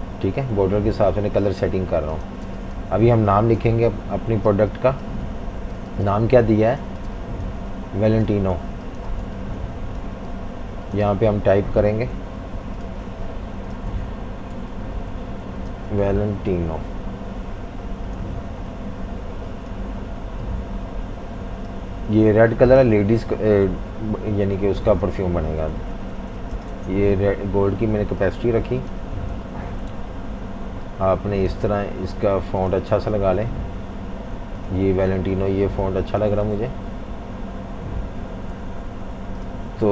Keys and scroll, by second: 0.0-1.1 typing, 2.3-7.1 typing, 3.6 super+-, 3.8 super+-, 8.1-10.4 typing, 12.1 F19, 13.4-17.0 typing, 25.4-28.0 typing, 29.3 typing, 36.6 Right, 36.8 Right, 37.0 Right, 37.5 Right, 37.5 Right, 37.6 Right, 37.7 Right.